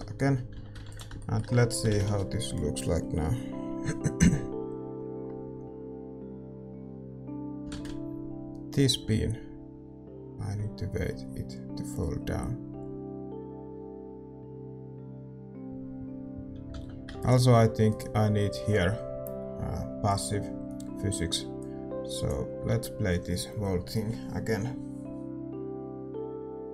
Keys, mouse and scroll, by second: 1.1 ctrl+s, 1.1 a, 2.8 shift+z, 17.9 alt+a, 17.9 ctrl+s, 17.9-20.1 right drag, 20.1-25.5 drag.